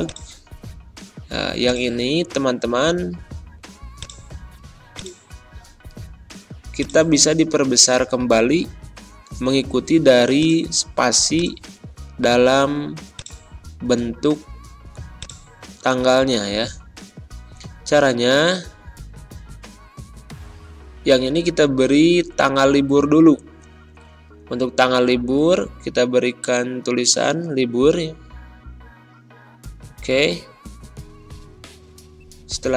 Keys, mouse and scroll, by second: 16.5 ctrl+scroll up 1, 19.7 scroll up 1, 19.8 Return, 22.3 BackSpace, 23.3 space, 25.6-27.8 typing, 29.1 r, 30.4 shift+;, 31.3 shift+Return, 32.5 2.